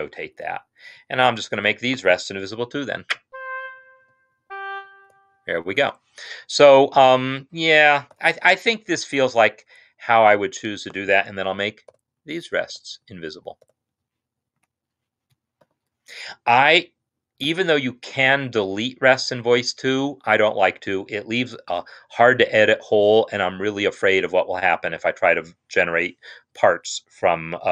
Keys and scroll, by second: 2.8 v, 3.2 Right, 3.7 Right, 4.1 v, 4.3 Right, 4.9 Right, 5.0 v, 5.9 Escape, 8.2 ctrl+s, 12.1 v, 12.3 Right, 12.7 v, 13.1 Right, 13.7 v, 14.7 Escape, 15.7 ctrl+s.